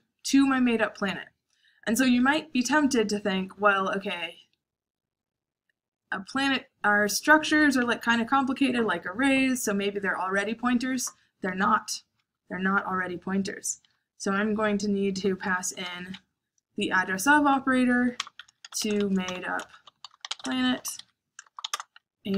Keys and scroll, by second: 15.8 shift+7, 17.6-19.5 typing, 22.1-22.3 typing.